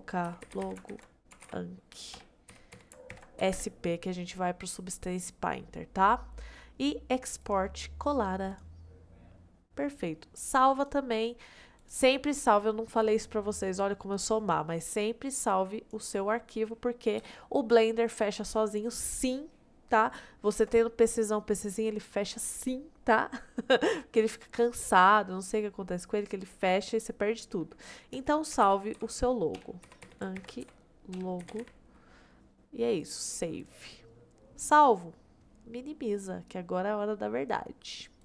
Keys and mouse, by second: 10.8-11.9 drag.